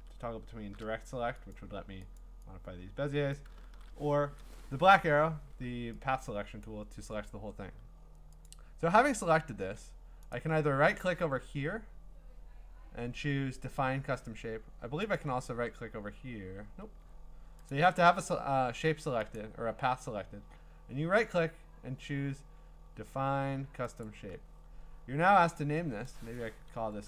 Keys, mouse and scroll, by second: 1.5 click, 2.2 click, 3.3 click, 3.6 a, 6.6 click, 8.5 click, 10.3 right click, 14.2 Escape, 15.2 right click, 16.8 Escape, 17.7 click, 19.4 right click, 24.1 click.